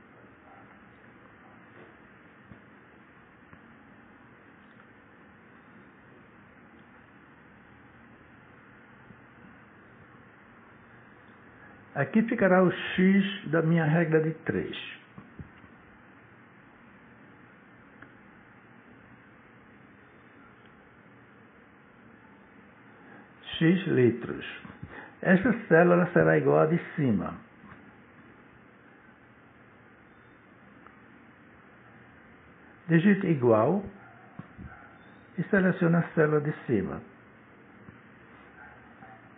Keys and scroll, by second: 15.6 shift+x, 17.9 0, 20.0 BackSpace, 21.5 Right, 23.1 l, 24.0 Right, 32.8 =.